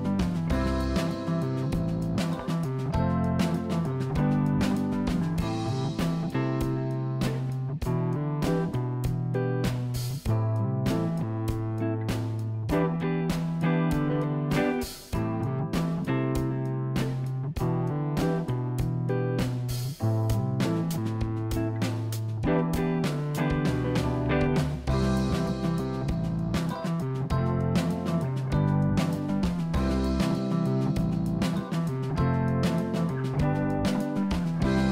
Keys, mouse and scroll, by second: 1.7 KP_1, 2.0 click, 5.6 shift+a, 9.3 s, 12.9 s, 18.7 r, 22.1 s, 26.4 g, 30.9-31.7 scroll up 1, 31.7-33.4 scroll down 1, 33.7 g.